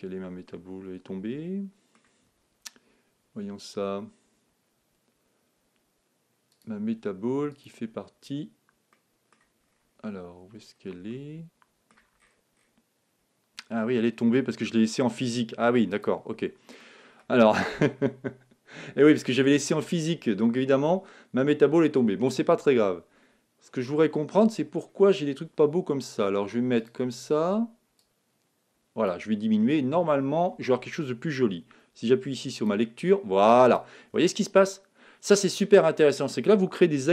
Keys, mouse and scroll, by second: 6.5-9.1 drag, 8.9-10.6 middle drag, 10.8-12.7 middle drag, 12.7-13.6 scroll down 1, 13.6-14.6 scroll down 1, 14.6-14.9 scroll up 1, 15.9-17.6 drag, 16.8-18.7 middle drag, 18.7-19.7 scroll up 1, 19.7 scroll up 1, 24.0-24.6 scroll up 1, 24.6-26.2 middle drag, 26.2-26.7 scroll down 1, 26.8-30.0 drag, 29.4-29.8 scroll up 1, 29.8-31.6 middle drag, 32.5-35.4 drag, 34.1-36.0 middle drag.